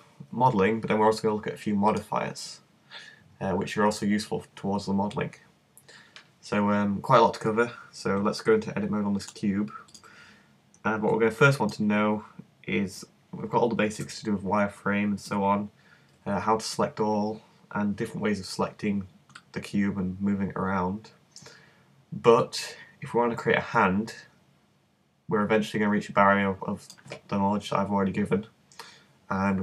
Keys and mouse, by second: 1.9-3.9 drag, 11.4-14.0 middle drag, 14.0 z, 15.3 z, 16.1 a, 16.7 a, 19.4 middle click, 19.8 middle click, 20.0 middle click.